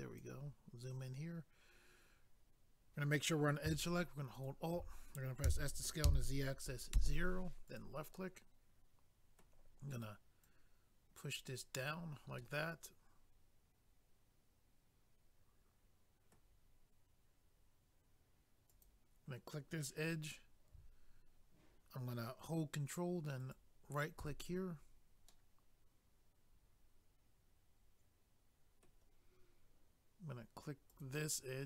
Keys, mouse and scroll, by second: 4.3 alt+click, 4.4 alt+click, 5.5 s, 7.7 click, 7.8 click, 10.4 click, 12.4 middle click, 18.7 click, 18.8 click, 23.4 ctrl+right click, 23.5 ctrl+right click, 25.3 middle click, 30.9 click, 31.0 click, 31.5-31.6 scroll down 1.